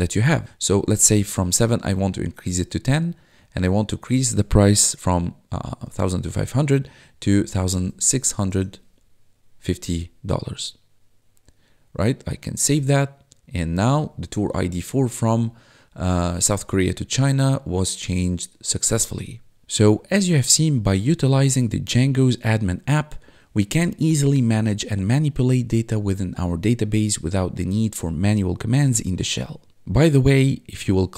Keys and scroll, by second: 7.4-9.0 typing, 14.3 1, 19.1 1.